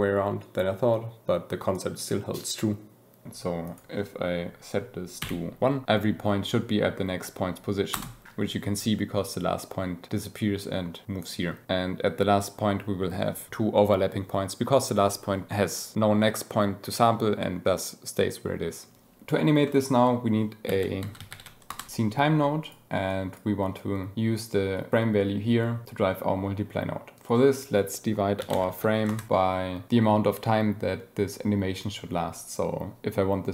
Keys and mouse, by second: 1.0-2.0 shift+drag, 3.6-7.9 drag, 19.6 click, 20.6 shift+a, 22.6 click, 23.1 click, 24.7-27.2 drag.